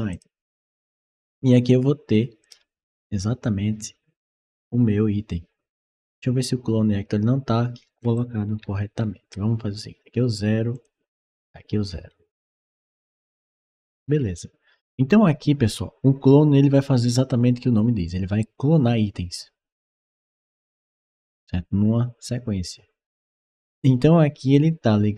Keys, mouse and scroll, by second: 2.2 click, 5.8 click, 8.0-9.1 right drag, 8.5 d, 9.0 s, 10.6 click, 11.1 click, 11.9-14.2 right drag, 12.2 a, 13.9 a.